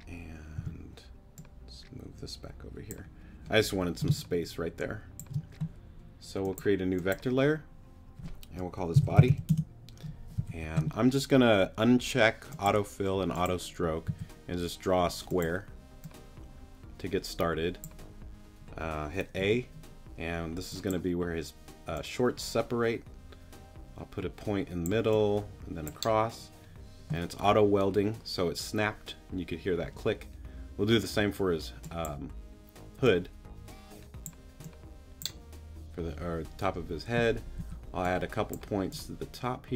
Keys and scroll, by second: 0.6 t, 4.1 space, 8.9 b, 9.0 o, 9.2 d, 9.3 y, 9.5 Return, 10.4 s, 14.1 s, 19.4 a, 37.6 a.